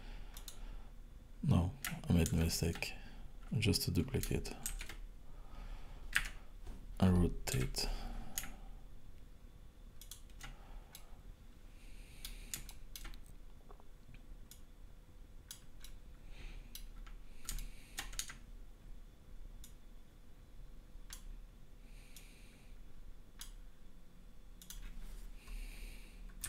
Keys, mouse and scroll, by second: 2.3 ctrl+z, 4.7 shift+d, 7.6 r, 10.9 middle click, 12.6 shift+middle click, 14.5 click, 15.8 middle click, 18.2 Tab, 19.6 click, 22.1 click, 24.6 click.